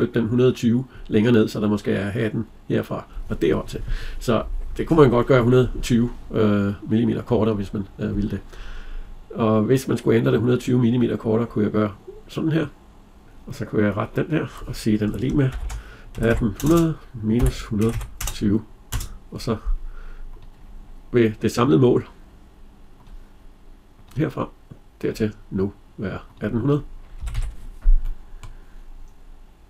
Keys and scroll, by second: 18.6 Return, 26.9 Escape.